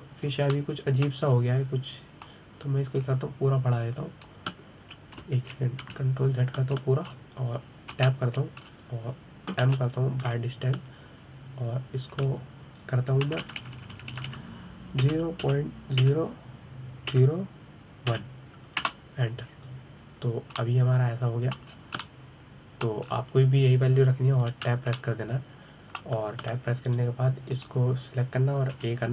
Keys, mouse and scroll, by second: 0.6-1.6 middle drag, 1.6-2.1 scroll up 2, 2.1 scroll down 1, 2.3 middle click, 3.1-4.8 scroll up 2, 4.8-7.2 drag, 7.2 ctrl+z, 7.7 ctrl+z, 8.9-9.8 scroll down 3, 9.8 Tab, 10.4-11.4 scroll up 2, 11.4 m, 13.9-15.2 drag, 15.2 BackSpace, 15.4 BackSpace, 15.9 BackSpace, 22.4-23.5 middle drag, 23.5-23.8 scroll up 2, 23.8-24.9 middle drag, 24.9-25.9 scroll down 4, 25.9-26.4 scroll down 1, 26.4 Tab, 26.8-29.1 middle drag.